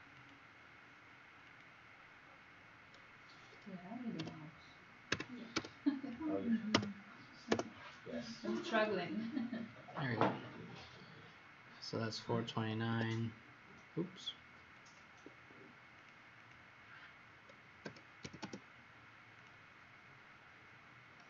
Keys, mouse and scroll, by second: 4.1-5.5 typing, 6.7 Return, 7.4 BackSpace, 8.7 click, 9.9-11.0 scroll down 3, 11.0-11.9 scroll up 2, 11.9 click, 12.8 Escape, 15.9 click, 16.4 click, 17.8-18.2 typing, 19.3 click.